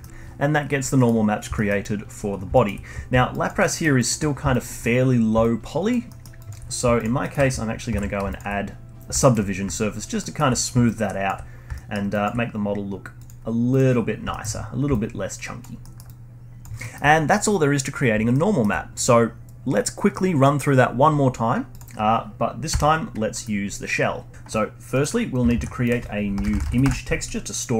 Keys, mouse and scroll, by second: 1.0 middle click, 1.6 alt+middle click, 1.8-2.5 alt+drag, 2.5-3.0 alt+middle drag, 3.0-3.3 scroll up 1, 3.3-3.6 alt+drag, 3.6-4.0 alt+middle drag, 4.0 alt+drag, 4.3 scroll up 1, 4.5-6.1 alt+drag, 6.1 alt+middle drag, 6.4 alt+click, 6.7 scroll down 1, 7.0 alt+click, 7.2-8.0 alt+middle drag, 8.0 ctrl+1, 8.3 alt+click, 9.2-9.8 alt+middle drag, 9.8-10.2 alt+drag, 10.2-10.5 alt+middle drag, 10.5-10.9 scroll up 1, 10.9-11.5 alt+drag, 11.5 scroll up 1, 11.7-12.1 alt+middle drag, 12.1-13.3 alt+drag, 14.1 scroll down 1, 14.3-14.7 alt+middle drag, 14.7 scroll down 2, 14.9-15.8 alt+drag, 15.8 alt+middle drag, 16.1-16.8 alt+drag, 16.8-21.3 alt+middle drag, 21.7 click, 22.7 f, 23.3 KP_Decimal, 24.0-24.3 scroll down 1, 24.9 middle click, 25.2-25.5 scroll down 1, 25.5 shift+a.